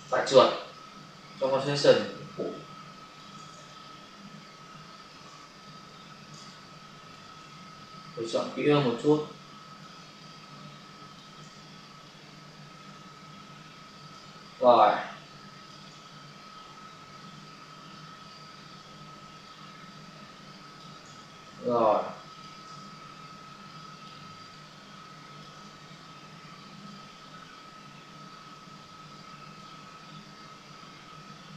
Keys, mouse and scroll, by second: 1.5 ctrl+space, 1.8 ctrl+click, 2.0 ctrl+space, 3.4 space, 3.7 ctrl+click, 5.9 click, 8.3 click, 9.9 space, 11.3 space, 12.0 click, 14.4 space, 14.7 click, 14.9 space, 17.8 click, 20.9 space, 23.6 click, 24.2 space, 24.5 click, 24.7 space, 26.8 click.